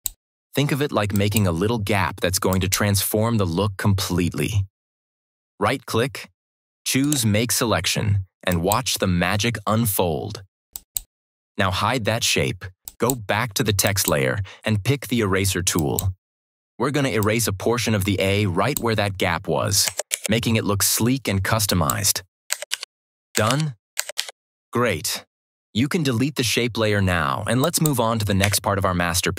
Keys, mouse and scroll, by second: 6.9 right click, 8.4 click, 13.6-18.7 drag, 20.0 ctrl+d, 21.6 click, 22.6 ctrl+-, 23.4 ctrl+-, 24.1 ctrl+=, 27.5 click, 28.3 Delete.